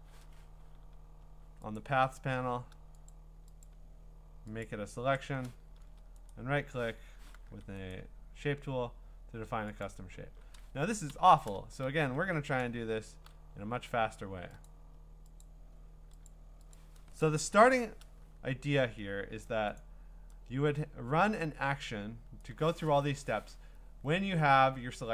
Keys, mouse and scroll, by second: 1.8 click, 3.1 click, 3.6 click, 4.6 click, 6.3 right click, 7.0 Escape, 7.5 a, 7.9 right click, 9.8 click, 11.1 Escape, 11.9 ctrl+z, 12.2 ctrl+z, 13.1 ctrl+z, 14.7 click, 15.4 click, 16.3 click, 16.7 click, 17.6 ctrl+i, 19.8 click, 21.4 click.